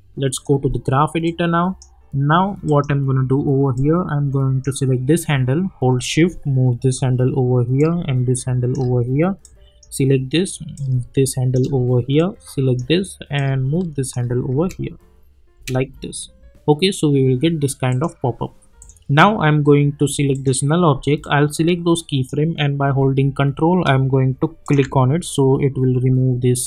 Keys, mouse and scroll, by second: 0.3 click.